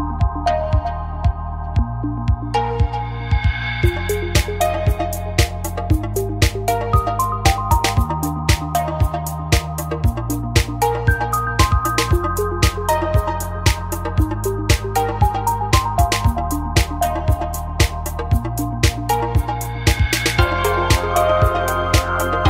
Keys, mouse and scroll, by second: 0.2 g, 2.7 click, 2.8-4.0 middle drag, 4.0 right click, 5.0 click, 5.3-6.7 middle drag, 6.7 g, 8.0 middle click, 8.7-9.9 right drag, 9.2 click, 9.9 g, 11.6 click, 12.0 a, 12.2-13.4 middle drag, 15.8-17.3 drag, 17.3 g, 19.0 middle click, 19.4-20.4 right drag, 20.8 g.